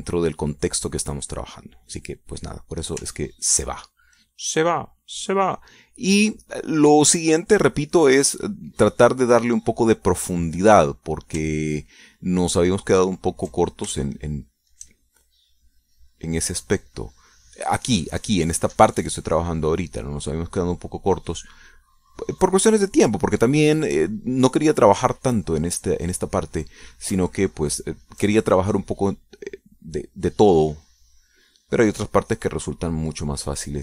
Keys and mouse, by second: 2.0 middle click, 2.3 click, 2.3 middle click, 4.3 ctrl+click, 4.7-8.1 ctrl+drag, 8.2-9.6 drag, 13.6 ctrl+click, 14.8-15.9 ctrl+shift+drag, 16.1-27.8 shift+drag, 28.3 ctrl+click, 28.7 ctrl+click, 29.7-33.8 drag.